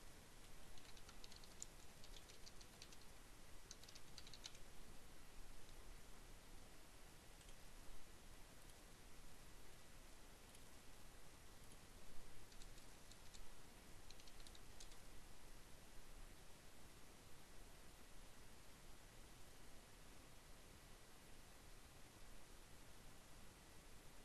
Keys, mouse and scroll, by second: 0.0-4.4 typing, 6.7 click, 8.2 click, 9.7 click, 10.9 click, 11.1 BackSpace, 13.3-14.4 typing, 14.7 Return.